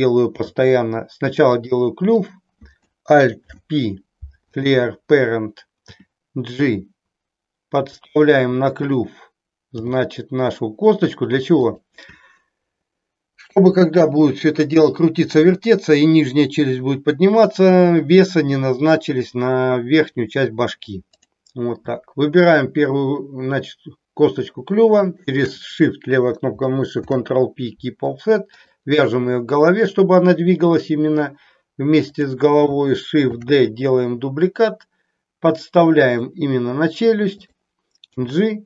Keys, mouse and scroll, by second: 0.4 e, 1.6 click, 2.1 click, 3.4 alt+p, 5.9 g, 8.0 click, 8.9 click, 9.8 g, 11.7 click, 21.3 click, 25.0 shift+click, 27.0 ctrl+p, 32.2 click, 33.3 shift+d, 36.1 click, 37.4 click, 38.0 g.